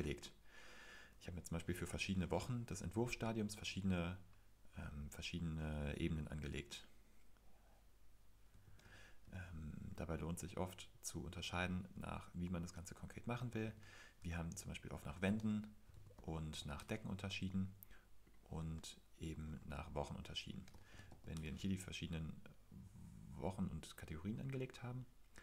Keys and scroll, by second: 0.0 shift+w, 3.2 typing, 8.4-9.9 typing, 12.6-14.2 typing, 15.3-17.1 typing, 18.6-21.6 typing.